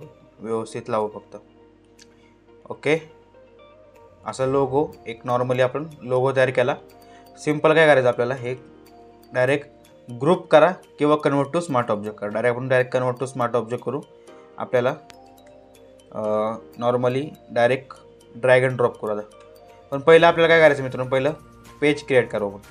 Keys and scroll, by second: 9.9 ctrl+g, 15.1 ctrl+z.